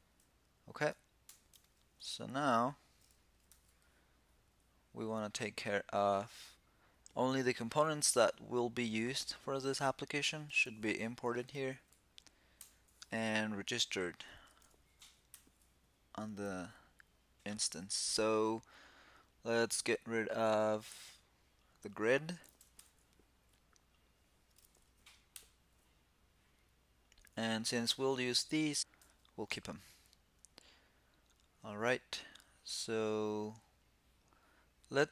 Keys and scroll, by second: 1.0 ctrl+l, 3.2 super+b, 12.3 shift+super+k, 15.0 shift+super+k, 22.5 shift+super+k, 25.0 shift+super+k, 28.7 super+s.